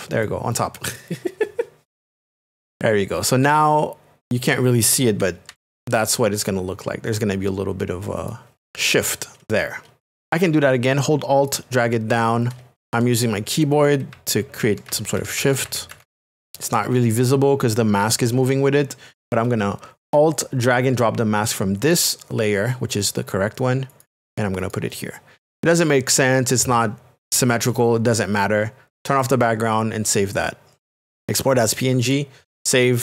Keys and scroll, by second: 5.5 ctrl+i, 12.8 Left, 13.6 Left, 14.1 Down, 15.2 Left, 16.5 Left.